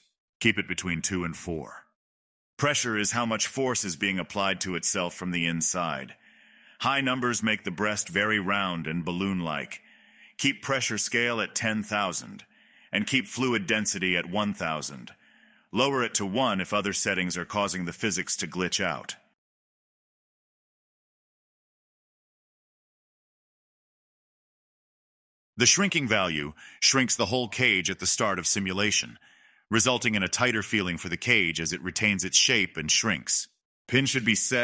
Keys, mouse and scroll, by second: 0.7 space, 1.0-2.1 middle drag, 2.1-3.6 scroll down 13, 3.6-5.5 drag, 5.5-6.6 middle drag, 6.6 click, 6.8 space, 8.5 space, 11.3-14.2 drag, 14.2 space, 18.4 space, 18.8-22.4 drag, 22.4 space, 23.9 space, 24.1-26.0 scroll down 11, 26.0-30.1 drag, 30.1 BackSpace, 32.6 click, 32.9 space, 34.2-34.6 middle drag.